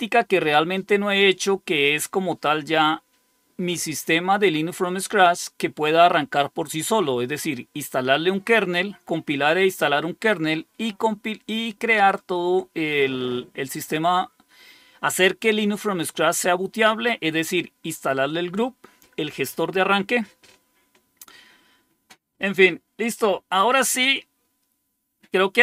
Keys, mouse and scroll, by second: 0.7 scroll down 2, 8.6 scroll down 2.